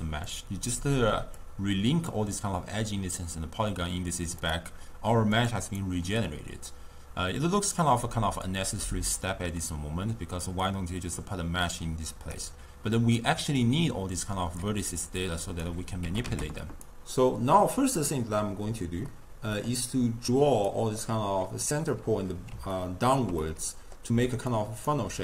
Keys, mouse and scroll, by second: 0.3-4.6 drag, 5.4 drag, 5.7 click, 7.9-8.9 drag, 8.9-10.6 middle drag, 10.6 click, 13.6 drag, 15.2 click, 16.1 g, 19.1-20.6 middle drag, 20.6 click, 21.1-24.2 middle drag, 24.2 d, 24.6-25.0 drag, 25.0 d.